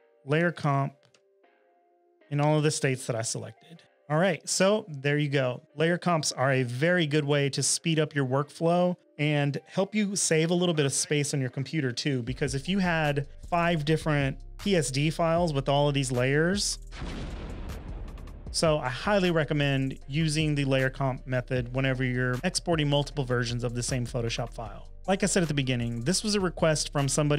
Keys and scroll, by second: 18.4 space.